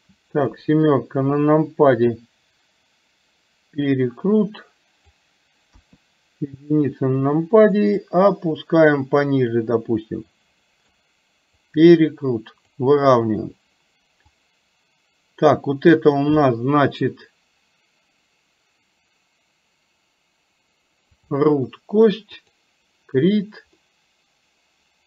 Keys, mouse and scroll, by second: 0.5 KP_7, 2.0-5.3 drag, 5.8 KP_1, 8.1-11.0 drag, 11.8-12.9 drag, 14.4 click, 16.4-21.4 drag, 23.9-25.0 middle drag.